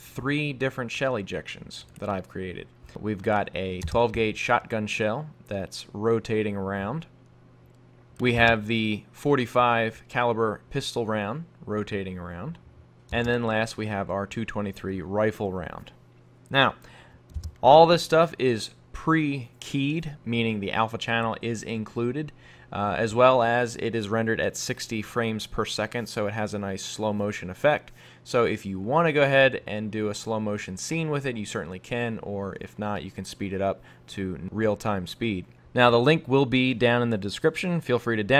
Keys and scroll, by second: 20.2 F11, 35.6 super+Tab.